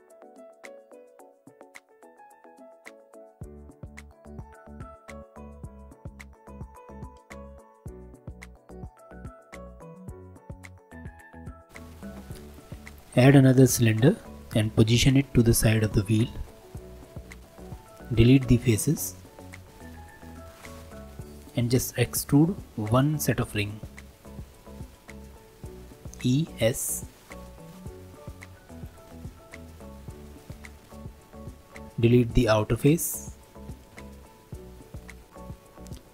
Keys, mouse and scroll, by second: 0.0 middle click, 0.2 alt+z, 0.3 middle click, 0.5 3, 0.7 alt+click, 1.1 alt+e, 2.1 alt+click, 2.6 alt+e, 4.0 2, 4.1 alt+click, 4.5 e, 5.0 g, 5.5 Tab, 5.6 scroll down 2, 5.7 middle click, 5.8 right click, 6.5 scroll up 1, 6.6 middle click, 6.8 click, 7.1 g, 7.7 click, 7.8 middle drag, 8.1 click, 8.4 shift+a, 9.6 scroll down 3, 9.8-11.0 drag, 11.0 s, 11.4 g, 11.9-12.9 middle drag, 11.9 s, 12.9 click, 13.5-16.2 middle drag, 16.2 Tab, 16.7 middle click, 17.3 3, 17.6-18.6 middle drag, 18.6 shift+click, 19.7 x, 20.2-25.0 middle drag, 26.0 e, 29.8 3, 32.0 alt+click, 33.6 x, 35.3-36.1 middle drag.